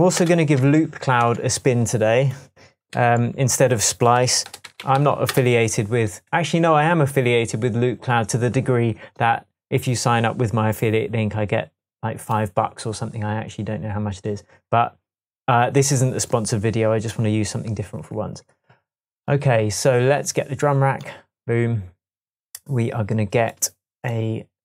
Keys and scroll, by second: 0.0-0.4 typing, 1.0 shift+Return, 1.2 shift+Tab, 2.9 super+r, 4.2-5.3 typing, 6.3 Return.